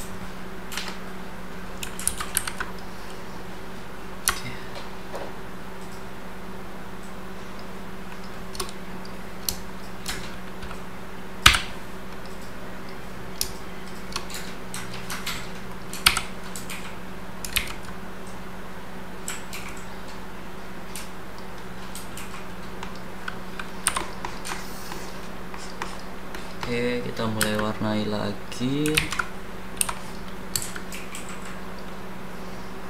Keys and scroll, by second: 2.0 ctrl+c, 2.5 ctrl+v, 11.5 c, 16.0 d, 17.5 ctrl+z, 23.8 h, 27.4 space, 28.9 ctrl+z, 29.8 h, 30.5 space.